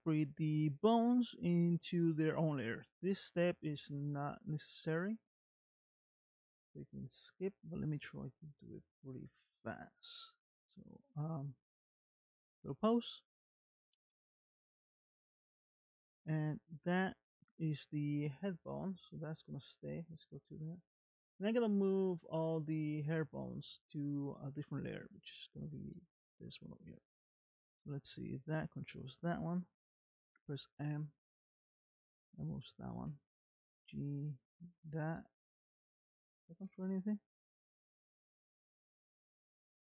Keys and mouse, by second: 3.1-4.4 middle drag, 12.1 ctrl+Tab, 13.4 middle click, 16.6 r, 25.2 middle click, 26.0 shift+middle click, 27.1 click, 27.7 r, 30.6 m, 32.4 click, 33.7 g, 35.4 middle click, 36.7 KP_Decimal, 38.0-39.2 middle drag.